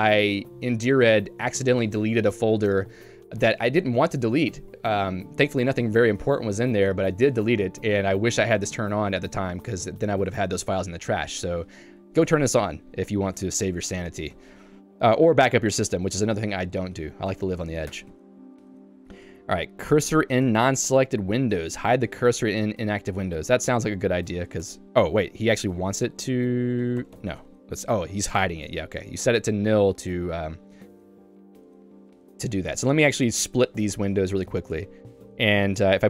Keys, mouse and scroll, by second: 13.4 Escape, 14.1 k, 17.3 j, 17.9 Escape, 18.2 k, 19.5 h, 20.6 shift+v, 24.7 Escape, 25.2 l, 25.4 l, 28.5 Return, 29.7 j, 31.9 q, 33.3 click, 33.7 Escape.